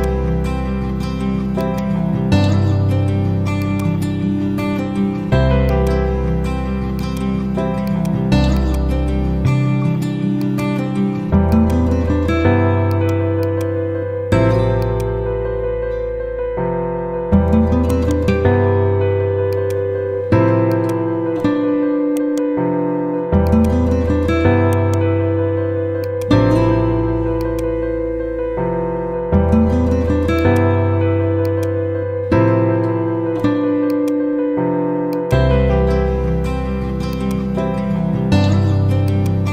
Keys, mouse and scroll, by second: 8.5-9.7 ctrl+drag, 11.4 shift+click, 12.2 e, 12.9-17.7 drag, 15.0-18.1 shift+drag, 17.7 shift+right click, 19.4 click, 22.1 right click, 23.4 click, 24.6 right click, 26.0 click, 28.4 F4, 30.3 click, 33.8 click, 36.2 z, 37.0-38.3 drag.